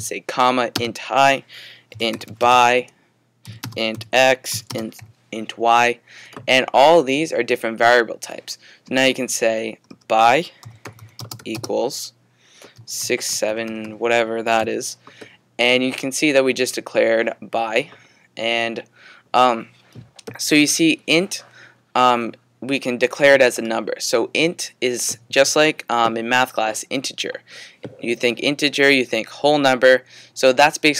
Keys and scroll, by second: 1.7-5.0 typing, 10.4-15.1 typing.